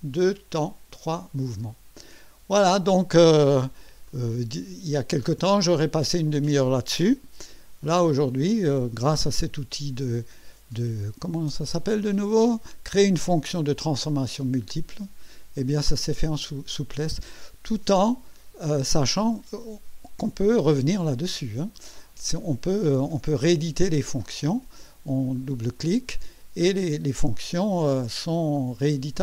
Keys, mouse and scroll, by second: 4.0-5.0 drag, 5.3 scroll up 1, 22.9 click, 24.2 click, 25.1 click, 28.3 click.